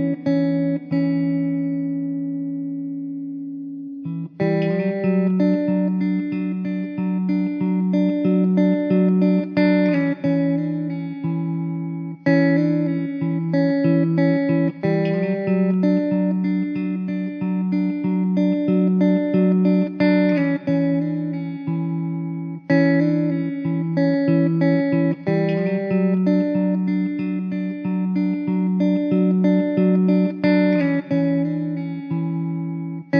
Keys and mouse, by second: 0.9 alt+w, 1.5 middle click, 3.2 alt+middle click, 4.4 alt+w, 10.6 1, 13.7 typing, 14.8 typing, 18.7 2, 23.5 1, 27.0 alt+w, 27.7 alt+middle click.